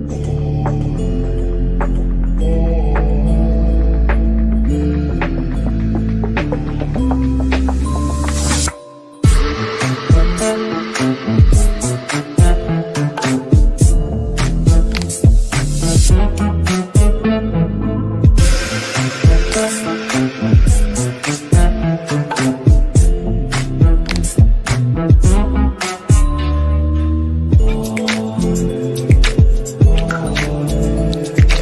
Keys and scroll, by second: 7.6 ctrl+r, 31.2 Delete.